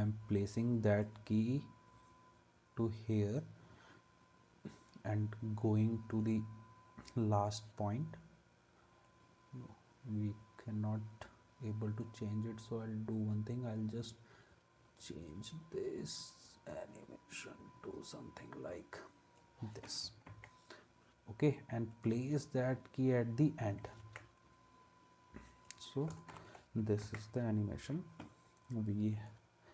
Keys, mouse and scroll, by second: 20.3 ctrl+s, 24.0 ctrl+s, 26.3 alt+], 27.1 ctrl+s.